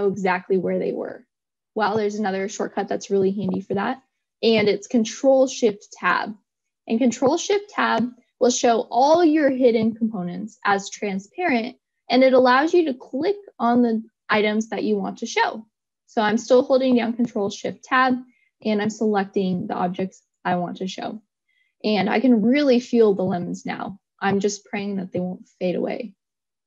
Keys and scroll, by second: 6.4 shift+Tab.